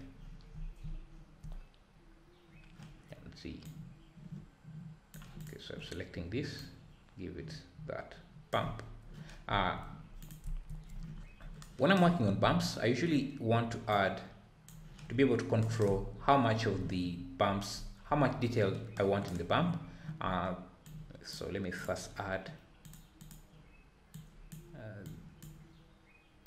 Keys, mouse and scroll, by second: 1.5-2.1 scroll up 2, 2.1-3.7 scroll down 1, 3.7-5.4 drag, 6.6-9.4 drag, 9.4 `, 13.9-15.3 drag, 15.3-15.6 scroll down 4, 15.9 scroll up 2, 16.2 `, 16.4 middle drag, 17.1-17.4 scroll down 3, 17.4-17.7 scroll up 4, 17.7 `, 20.8-22.0 drag, 22.9 click, 25.3 click.